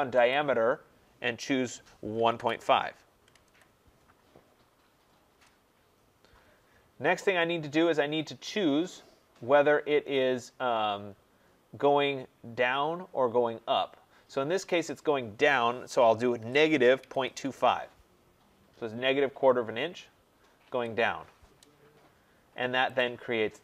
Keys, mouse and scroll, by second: 0.3 click, 1.9-3.3 typing, 5.3 Return, 16.3-17.9 typing, 20.6 Return, 21.9-22.5 scroll, 23.0 click.